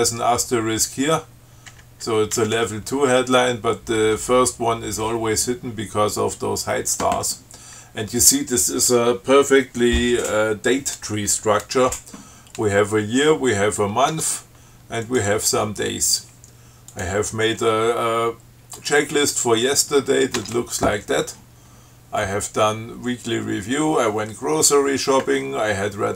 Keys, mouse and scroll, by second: 2.0 Right, 2.6 Left, 4.4 Right, 14.3 Tab, 15.3 click, 17.2 click, 19.0 click, 20.6 Tab.